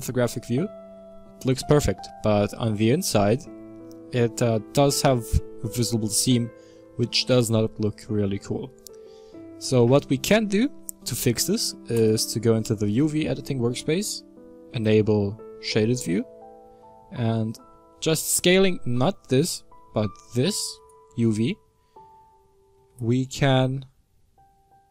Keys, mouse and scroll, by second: 0.3-1.0 scroll up 2, 1.0-2.5 shift+middle drag, 2.5-6.7 scroll up 4, 11.8 click, 14.8 click, 15.8 middle click, 16.3-16.8 scroll up 2, 16.8-17.3 shift+middle drag, 17.3-18.7 scroll up 2, 18.7 s, 20.1 s, 21.6-22.1 scroll up 11.